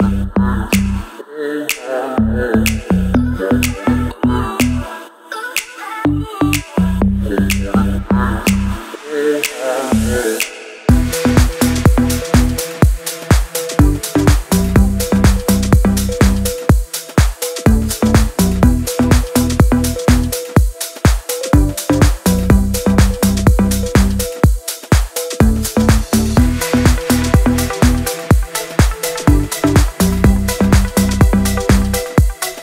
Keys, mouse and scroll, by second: 2.4 Right, 3.8 Down, 4.7 ctrl+Page_Down, 5.8 shift+Page_Down, 6.1 ctrl+Page_Up, 7.4 Left, 8.1 Down, 9.4 click, 15.1 right click, 15.5 click, 15.7-16.1 scroll down 1, 16.1 click, 18.3 ctrl+z, 19.4 click, 20.0 scroll up 1, 20.1 scroll down 1, 20.5 right click, 21.1 click, 21.9-22.4 scroll up 1, 22.7 scroll down 1, 23.3 shift+F4, 23.8 scroll up 1, 24.1-24.5 scroll down 1, 24.5 scroll up 1, 25.1 scroll down 1, 25.7-26.7 scroll up 1, 28.5 click, 30.7-32.6 typing.